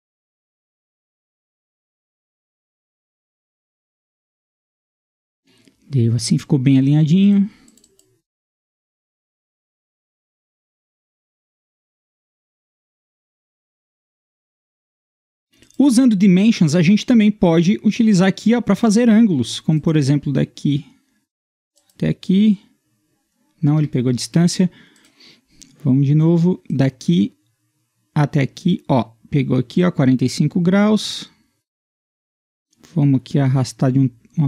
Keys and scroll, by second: 23.8 Escape.